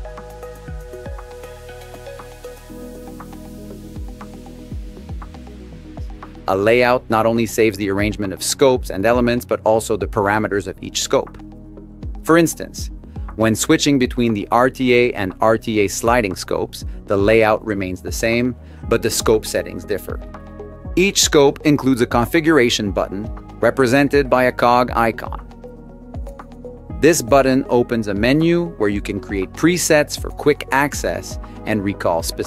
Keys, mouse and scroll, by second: 0.4 Tab, 10.7 Tab, 11.0 Tab, 14.2 Tab, 16.6 shift+Tab, 18.7 Tab, 24.4 click, 29.6 click.